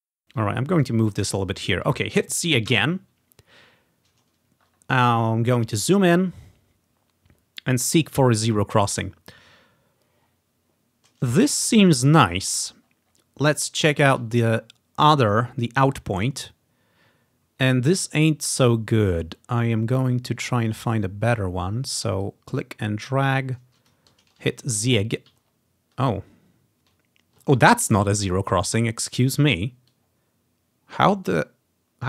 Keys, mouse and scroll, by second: 0.5-1.5 drag, 2.6-3.6 drag, 2.8 z, 4.7-5.8 scroll up 1, 6.3 scroll up 1, 7.1-7.7 scroll up 1, 7.7 scroll up 1, 8.8-10.2 scroll down 2, 11.6-12.5 scroll up 2, 12.5 typing, 12.7-14.2 ctrl+scroll down 4, 14.6 scroll up 1, 15.2-17.4 ctrl+scroll up 5, 18.5-19.7 ctrl+scroll down 2, 19.7 ctrl+scroll down 1, 19.8 ctrl+scroll up 2, 22.3-24.0 drag, 24.2 ctrl+scroll up 1, 24.3 ctrl+click, 24.9 z, 25.5 ctrl+scroll down 1, 26.4 ctrl+scroll up 2, 27.5 scroll up 1, 27.6 scroll down 1, 28.4 scroll up 1, 28.9 ctrl+scroll up 1, 30.0-32.0 drag.